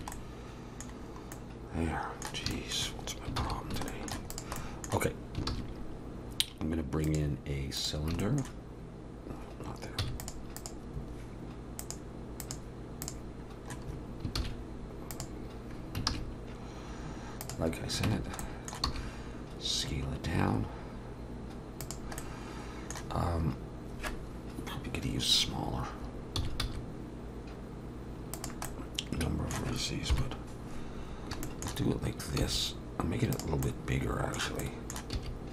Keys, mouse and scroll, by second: 0.1 middle click, 1.0-1.6 scroll down 3, 1.3 middle click, 2.5 shift+middle click, 3.4 ctrl+s, 3.9 shift+middle click, 4.3 click, 4.6 middle click, 5.5 shift+a, 8.2 shift+middle click, 10.0 x, 10.6 click, 11.8 click, 14.4 shift+s, 16.1 shift+a, 18.1 Tab, 18.4 middle click, 18.9 s, 22.2 middle click, 28.7 middle click, 28.7 s, 30.1 KP_7, 31.1-31.7 scroll down 3, 31.4 shift+middle click, 31.9-32.5 scroll up 2, 32.4 s, 33.6 middle click, 34.9 middle click, 35.1 s.